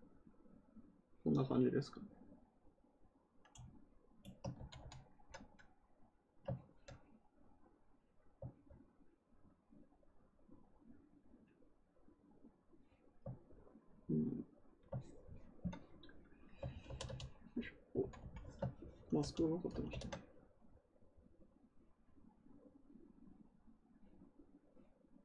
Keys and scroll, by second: 4.5 ctrl+z, 4.7 ctrl+z, 16.8 ctrl+d, 17.0 ctrl+d, 17.9 ctrl+z, 18.1 ctrl+z, 19.1 ctrl+d, 19.6 ctrl+d, 19.8 ctrl+d.